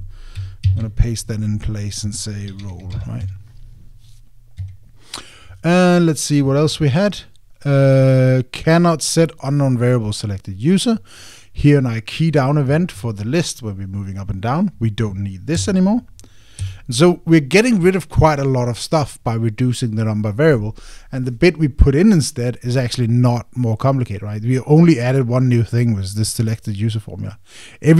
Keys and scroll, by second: 1.4 super+v, 4.0 Tab, 5.4 Escape.